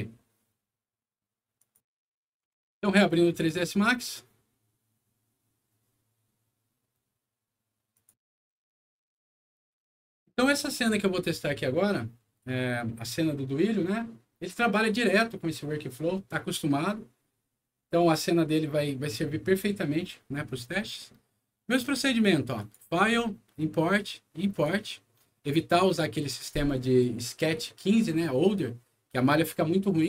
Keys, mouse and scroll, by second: 1.6 click, 3.3 click, 7.9 click, 22.6 click, 24.5 click, 27.0 click, 28.8 scroll down 2.